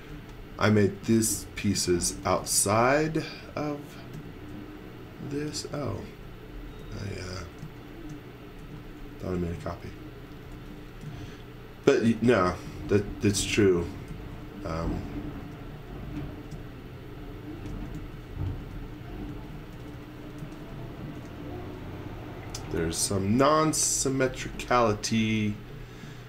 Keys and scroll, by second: 1.7-4.1 typing, 6.7 space, 8.5 m, 10.5-14.1 typing, 15.4 m, 17.9-21.2 typing, 22.3 e, 23.0 super+z, 24.2 space, 25.4 e.